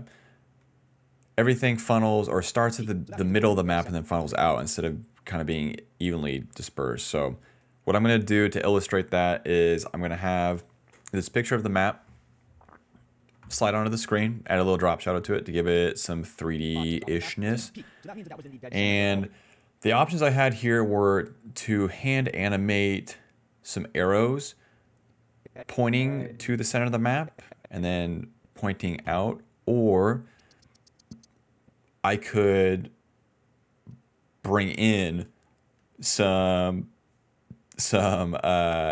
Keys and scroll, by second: 0.2 s, 0.6 d, 2.5 ctrl+s, 2.6 space, 2.9 d, 3.8 space, 5.4 s, 16.2-19.2 typing.